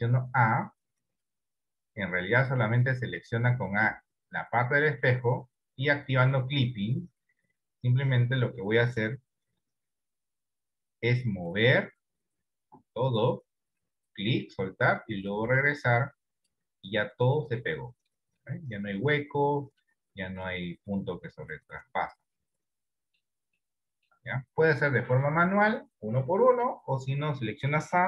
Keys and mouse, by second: 3.0-5.1 middle drag, 8.2 middle click, 9.6 KP_1, 10.3 KP_7, 11.6-14.1 drag, 15.0-16.6 drag, 17.0-18.2 middle drag, 18.6 middle click, 19.6 middle click, 20.3-23.2 middle drag, 23.8 shift+middle click.